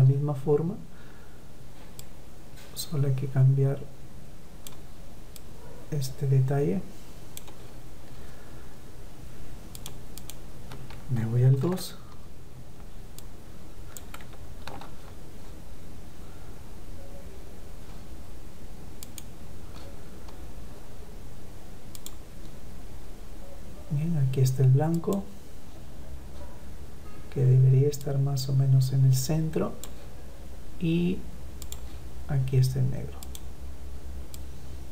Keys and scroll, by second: 10.2 ctrl+v, 13.8 ctrl+z, 14.3 ctrl+z.